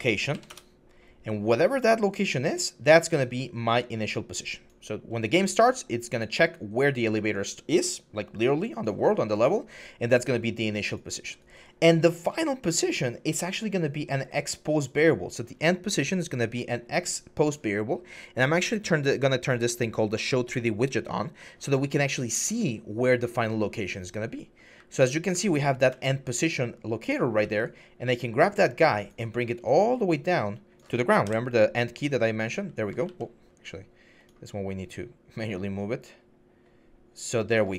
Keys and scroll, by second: 0.1 Up, 0.3 Return, 24.1-25.7 typing, 27.2 s, 31.0 End, 32.3 a, 32.8 ctrl+z.